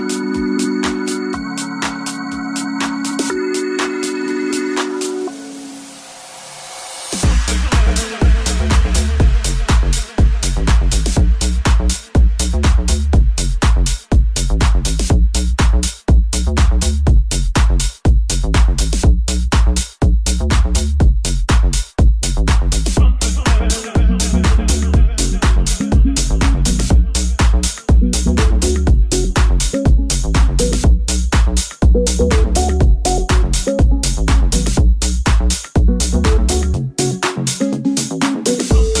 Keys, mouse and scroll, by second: 1.5 shift+click, 1.7 shift+click, 1.9 shift+click, 2.1 shift+click, 2.4-22.7 shift+drag, 2.6 shift+middle click, 2.6 shift+right click, 4.2 shift+middle click, 4.2 shift+right click, 4.4 shift+middle click, 4.4 shift+right click, 4.7 shift+middle click, 4.7 shift+right click, 4.9 shift+middle click, 4.9 shift+right click, 6.1 shift+middle click, 6.1 shift+right click, 6.3 shift+middle click, 6.3 shift+right click, 6.6 shift+middle click, 6.6 shift+right click, 6.9 shift+middle click, 6.9 shift+right click, 7.7 shift+middle click, 7.7 shift+right click, 10.1 middle click, 10.1 right click, 10.1 1, 11.3 middle click, 11.3 right click, 12.5 j, 12.5 3, 12.7 middle click, 12.7 right click, 12.9 shift+middle click, 12.9 shift+right click, 13.2 middle click, 13.2 right click, 13.5 shift+middle click, 13.5 shift+right click, 16.8 middle click, 16.8 right click, 17.1 shift+middle click, 17.1 shift+right click, 17.3 shift+middle click, 17.3 shift+right click, 17.5 shift+right click, 17.9 shift+right click, 18.2 shift+right click, 18.7 shift+right click, 18.9 shift+right click, 19.5 shift+middle click, 19.5 shift+right click, 19.8 shift+middle click, 19.8 shift+right click, 20.0 shift+middle click, 20.0 shift+right click, 20.2 shift+middle click, 20.2 shift+right click, 20.9 shift+middle click, 20.9 shift+right click, 22.9-32.2 drag, 25.6 middle click, 25.6 right click, 25.9 shift+middle click, 25.9 shift+right click, 26.1 shift+middle click, 26.1 shift+right click, 26.4 shift+middle click, 26.4 shift+right click, 26.8 shift+right click, 27.1 shift+right click, 27.4 shift+right click, 27.7 shift+right click, 28.2 shift+right click, 28.8 shift+middle click, 28.8 shift+right click, 30.7 middle click, 30.7 right click, 31.1 shift+middle click, 31.1 shift+right click, 31.7 shift+middle click, 31.7 shift+right click, 31.9 shift+middle click, 31.9 shift+right click, 32.2 shift+middle click, 32.2-33.6 shift+right drag, 32.5 shift+click, 32.5 shift+middle click, 32.8 shift+click, 32.8 shift+middle click, 33.1 shift+click, 33.1 shift+middle click, 33.2-39.0 shift+drag, 33.2 shift+middle click, 36.7 right click, 38.4 right click.